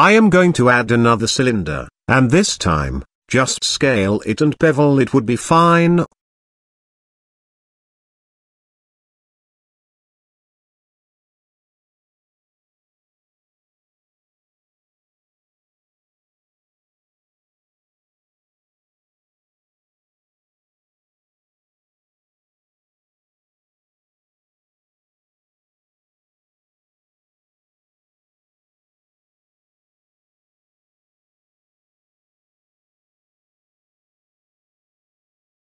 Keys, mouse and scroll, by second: 2.1 s, 3.3 s, 4.8 r, 6.4 middle click, 6.5-6.9 scroll down 1, 7.3 KP_Decimal, 8.2 s, 10.8-11.2 middle drag, 11.9 Tab, 12.8 click, 13.3 click, 15.3 i, 17.5 middle click, 18.8 g, 20.1 g, 21.5 scroll up 1, 22.2 i, 27.0 click, 28.1 ctrl+b, 29.2 Tab, 29.6 ctrl+a, 30.6 ctrl+b, 32.4 Tab, 33.0 g, 35.5 middle click.